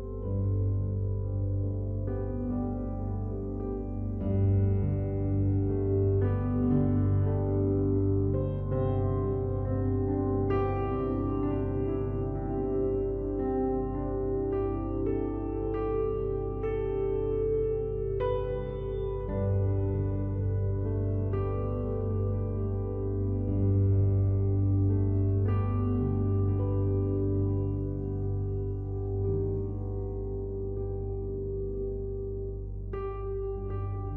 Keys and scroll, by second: 0.7 ctrl+z, 24.1 ctrl+t.